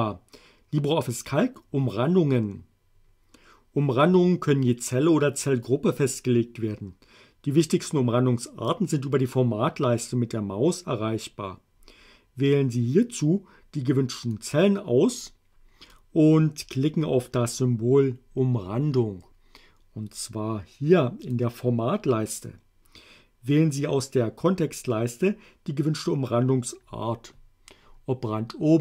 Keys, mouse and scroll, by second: 14.3-16.1 drag, 21.3 click.